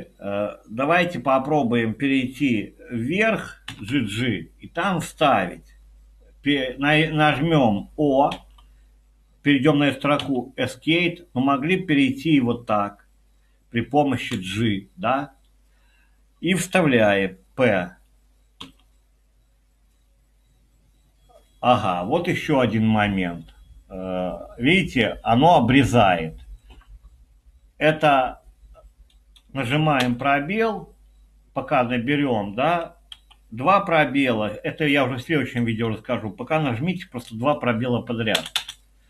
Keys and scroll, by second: 3.4-4.4 typing, 8.4 o, 10.2 Escape, 12.1 Up, 14.3 j, 18.7 p, 30.1 space, 33.2 Escape, 38.4 space, 38.6 space.